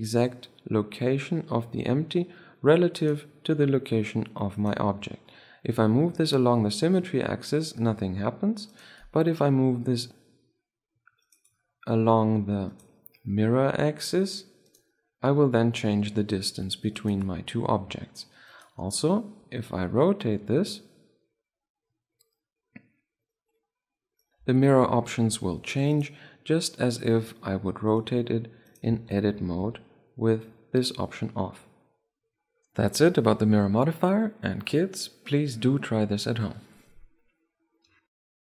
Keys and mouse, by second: 3.6-7.2 right drag, 5.9-7.9 drag, 10.0-11.4 drag, 13.3-15.1 right drag, 15.3-17.0 right drag, 16.0-17.7 drag, 18.5-19.1 middle drag, 19.1-20.9 right drag, 20.1 r, 24.7 r, 28.2-29.9 drag, 29.0 right click, 29.2 Tab, 29.9 r, 29.9 right click.